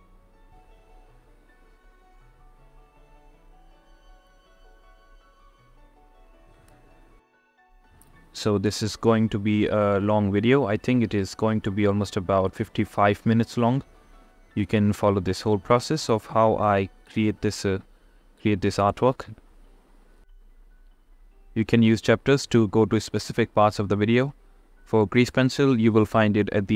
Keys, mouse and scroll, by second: 0.2 click, 1.2 ctrl+z, 1.4 click, 1.7-7.2 typing, 3.0 click, 3.7 ctrl+z, 4.1 click, 4.6 click, 5.3 ctrl+z, 5.5 click, 6.5 click, 7.3 click, 7.9 ctrl+z, 8.0 ctrl+z, 8.6 ctrl+z, 8.8-11.8 typing, 9.1 click, 9.8 ctrl+z, 10.1 click, 10.7 click, 12.3 click, 14.1 click, 14.5 click, 16.2 ctrl+z, 16.3 ], 16.7 click, 21.4 click, 23.4 click, 25.1 click, 25.5 click.